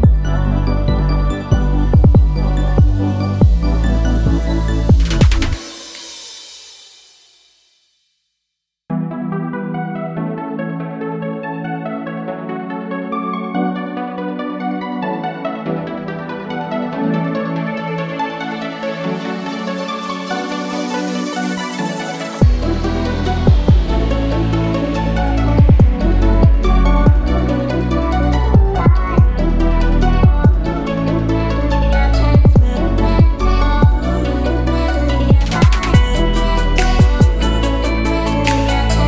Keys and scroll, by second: 0.0 shift+5, 0.3 shift+Return, 1.2 Return, 8.2 BackSpace, 8.3 3, 8.7 Return, 25.0 0, 25.4 shift+5, 25.7 shift+Return, 34.2 BackSpace, 34.4 2, 34.8 Return.